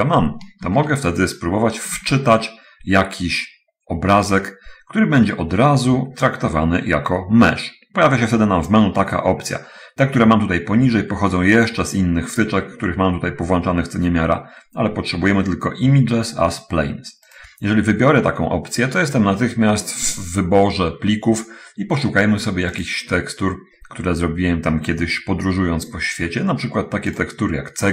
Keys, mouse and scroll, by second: 0.3 click, 2.3 shift+a, 17.3 click, 23.2 click, 27.5 click.